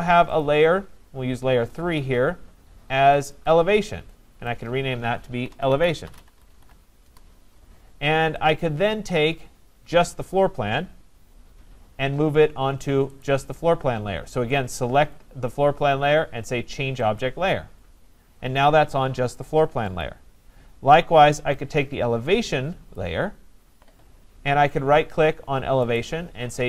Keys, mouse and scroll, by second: 0.4 click, 3.3 click, 3.5 click, 4.5 click, 5.2-7.1 typing, 7.1 Return, 8.5 click, 8.5 typing, 10.3 click, 13.2 right click, 17.2 click, 20.0 click, 23.0 click, 25.9 right click.